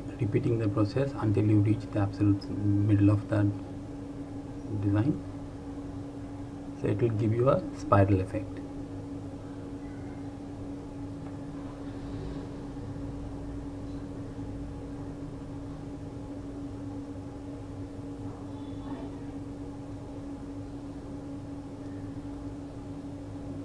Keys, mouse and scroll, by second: 0.8 click, 3.7 shift+click, 7.1 shift+click, 13.0 click, 17.5 ctrl+Num_Lock, 17.8 ctrl+z, 21.4 shift+click.